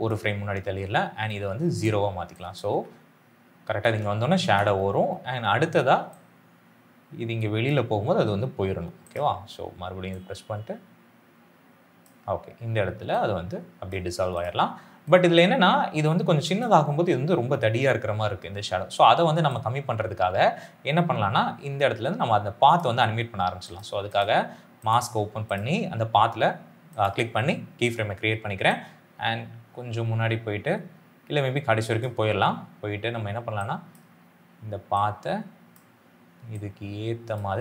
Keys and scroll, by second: 2.6 space.